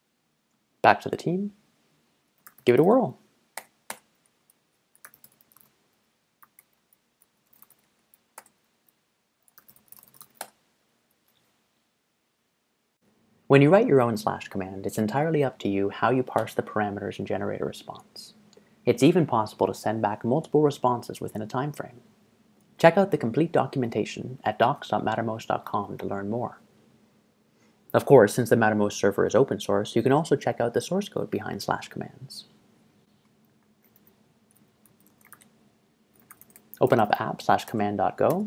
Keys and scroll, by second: 2.2-3.4 typing, 3.6 Return, 3.9 Return, 4.8-10.8 typing, 24.7 ctrl+shift+Tab.